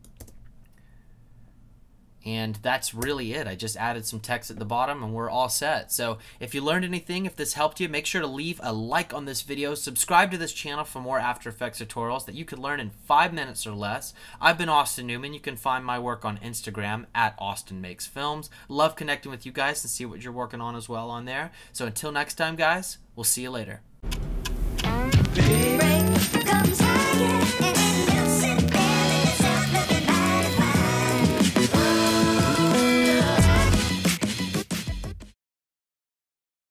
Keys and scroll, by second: 0.2 space, 3.0 space.